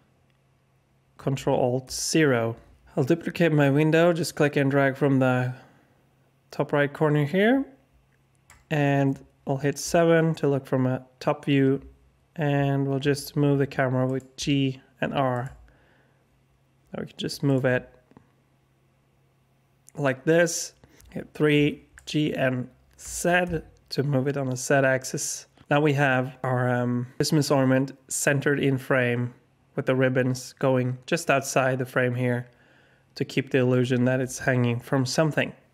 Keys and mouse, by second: 1.8 ctrl+alt+KP_0, 4.2-8.4 drag, 9.8 KP_7, 13.0 g, 14.3 r, 15.4 g, 17.6 g, 21.0 KP_3, 23.0 g.